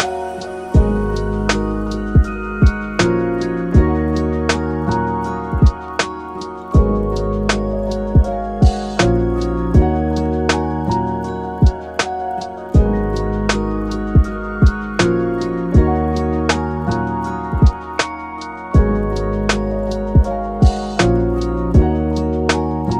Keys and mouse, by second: 3.4-3.8 middle drag, 5.2 click, 6.3 click, 6.6 click, 6.9-8.3 shift+drag, 8.4 Tab, 9.2 middle click, 10.2 click, 10.8 click, 11.7 shift+click, 12.2 middle click, 13.3 shift+click, 15.4 middle click, 16.1 shift+click, 16.7 shift+middle click, 17.1 middle click, 17.5 shift+click, 18.4 shift+click, 19.0 middle click, 19.6 click, 20.1 click, 20.7 middle click, 21.4 Tab, 21.6 middle drag.